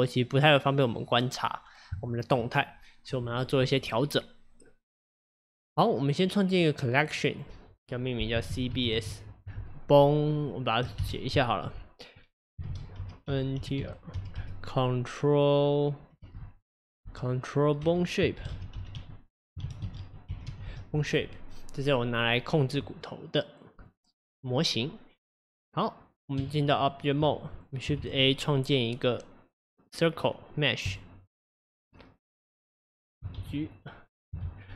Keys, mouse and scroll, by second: 0.5-1.3 middle drag, 1.3 scroll up 2, 2.1-5.2 shift+middle drag, 5.6 click, 6.5-7.3 drag, 7.4-10.4 drag, 23.8 click, 26.4 Tab, 27.6 click, 28.0 shift+a, 33.4 alt+g, 34.5 shift+s.